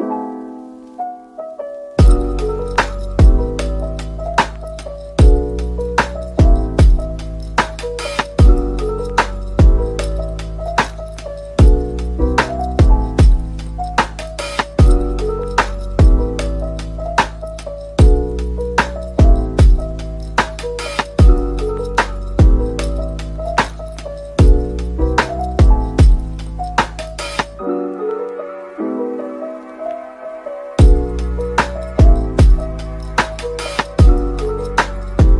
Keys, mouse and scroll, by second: 0.0 ctrl+z, 0.4 shift+click, 1.0 ctrl+l, 4.1-5.0 scroll down 1, 7.9 middle click, 9.5 ctrl+l, 12.2 scroll down 1, 14.7 Tab, 15.0 middle click, 15.4 Tab, 16.9 ctrl+z, 18.4 Tab, 18.8 Tab, 19.3 middle click, 20.8 double click, 21.9-23.1 scroll down 1, 23.4 scroll up 1, 25.7 shift+click, 29.4-29.7 scroll down 1.